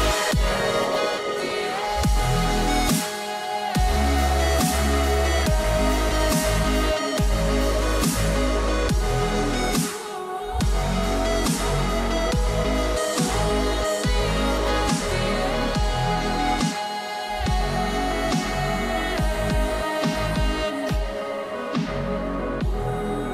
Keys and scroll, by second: 1.4 [, 6.9 ], 9.7 [, 11.8 [, 14.0 ], 15.9 ], 20.3 [.